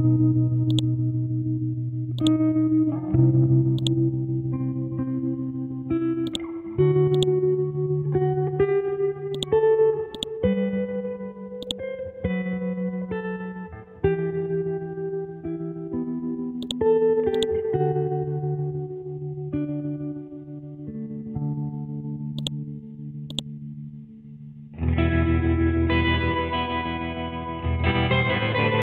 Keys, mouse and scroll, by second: 1.5 scroll down 1, 2.2 click, 2.8 scroll up 1, 3.8 click, 4.3 Down, 5.6-6.3 scroll down 1, 6.3 click, 8.0 Down, 10.7 Down, 11.6 click, 12.2-13.0 scroll down 1, 13.0-14.8 scroll up 1, 16.6-22.4 drag.